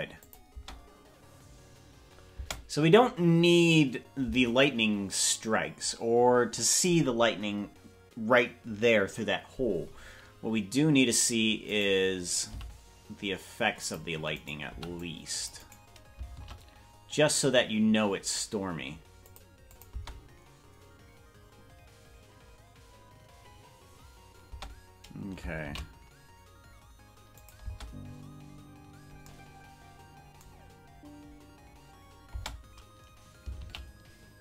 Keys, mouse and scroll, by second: 0.3-3.1 drag, 0.7 space, 2.5 space, 11.8 right click, 12.6 g, 14.5 right click, 14.7 c, 16.5 shift+d, 19.9 click, 20.2 space, 24.6 space, 25.7 shift+d, 27.8 space, 32.7 space, 33.9 shift+d.